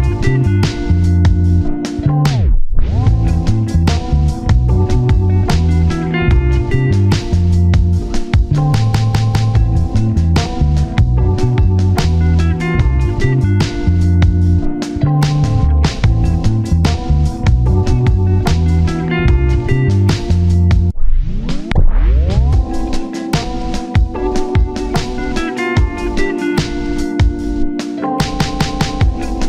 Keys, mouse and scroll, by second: 0.0 shift+click, 1.3-2.0 scroll up 1, 2.2 shift+click, 4.3 double click, 5.9-6.6 scroll down 2, 6.0 1, 6.6 scroll up 1, 6.8 1, 8.3 double click, 8.6 alt+z, 9.6 1, 10.8 typing, 12.0 typing, 13.2 typing, 13.9 shift+click, 14.9 shift+click, 15.7-17.8 typing, 17.3 shift+middle click, 18.8 alt+z, 18.9 alt+z, 19.9 scroll up 1, 23.5-24.1 typing, 24.2 double click, 24.3 scroll up 1, 24.5 scroll down 1, 25.0 scroll up 1, 25.1 shift+middle click, 25.8 shift+click, 26.4 ctrl+z, 26.5 shift+click, 27.9 double click.